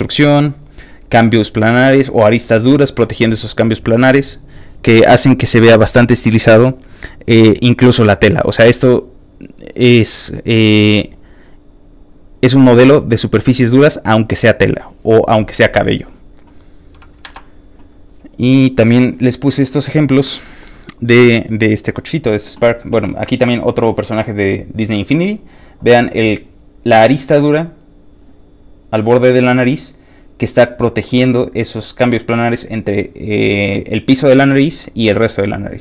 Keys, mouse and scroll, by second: 17.2 Tab, 17.3 Right, 18.2 alt+click.